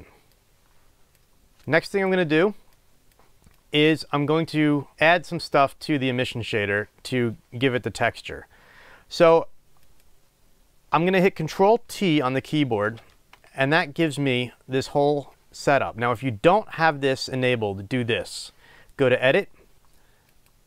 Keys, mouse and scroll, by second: 0.3-1.7 drag, 3.5 click, 9.8 click, 13.1 ctrl+t, 14.0-20.5 drag.